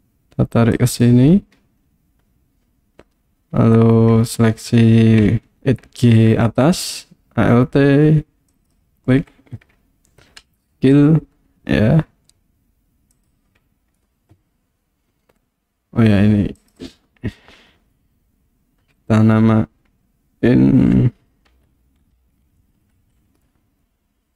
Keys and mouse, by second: 0.9 click, 8.6 alt+click, 10.4 s, 13.1 click, 16.8-24.3 drag.